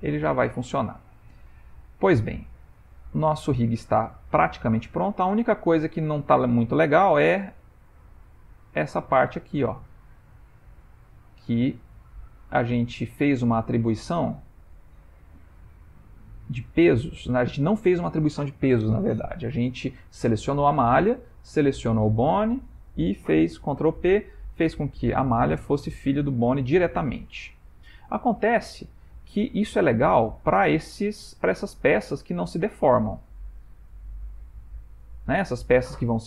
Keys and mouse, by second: 0.5 shift+middle click, 1.0 ctrl+middle click, 1.6 shift+middle click, 2.5 ctrl+middle click, 3.4 click, 3.7 g, 7.2 middle click, 8.3 shift+middle click, 8.6 shift+middle click, 8.8 ctrl+middle click, 9.8 middle click, 11.3 shift+middle click, 11.9 ctrl+middle click, 13.3 ctrl+middle click, 13.4 shift+middle click, 14.1 shift+middle click, 14.2 shift+middle click, 14.3 shift+middle click, 15.1 alt+g, 15.8 ctrl+middle click, 16.3 shift+middle click, 17.1 middle click, 20.3 click, 22.0 shift+click, 23.6 ctrl+p, 25.7 Down, 26.0 Down, 26.4 Down, 30.1 click, 30.6 g, 31.9 click, 32.3 g, 33.5 click, 34.2 click, 34.5 g.